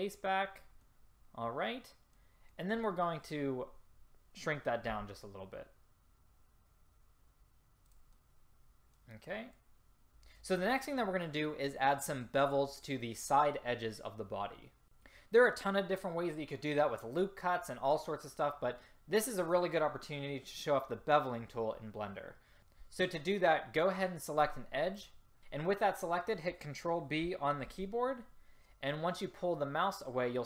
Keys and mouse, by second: 0.4-1.9 drag, 5.0 s, 25.1 click, 27.8 ctrl+b.